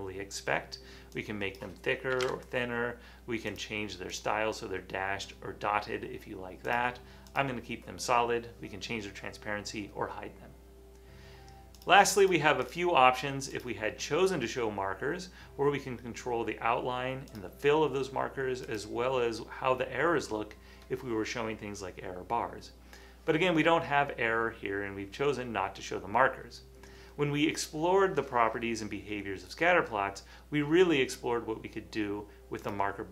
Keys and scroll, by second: 2.4 1.